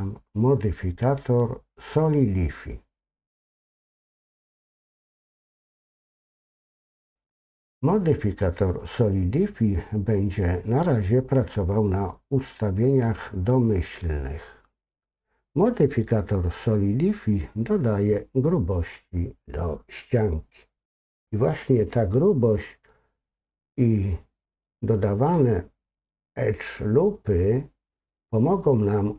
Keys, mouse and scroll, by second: 3.4-5.4 drag.